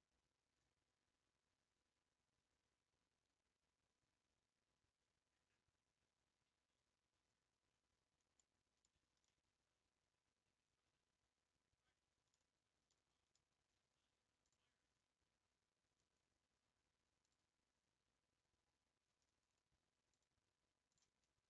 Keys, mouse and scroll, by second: 3.5-6.9 scroll up 1, 7.7-8.2 scroll down 1, 8.2-9.0 scroll down 4, 8.5 middle click, 9.2-12.4 middle drag, 12.4-12.7 scroll up 4, 12.9-14.5 middle drag, 14.5 click, 17.3 click, 20.2 ctrl+click, 21.0 ctrl+click.